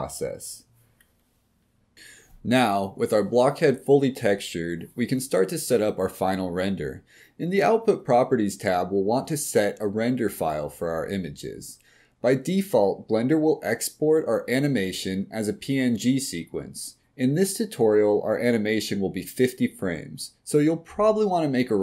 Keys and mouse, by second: 0.0 click, 0.3 middle drag, 3.5 click, 5.0 click, 9.8 click.